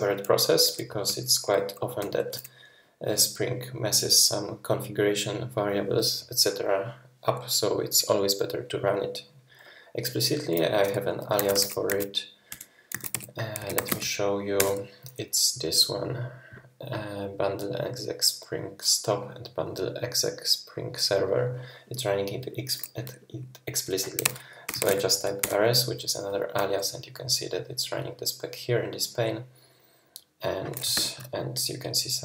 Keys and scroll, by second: 1.1 super+[, 2.0 super+], 11.1-14.2 typing, 14.6 Return, 24.2-25.2 typing, 25.4 Return, 30.9 super+[.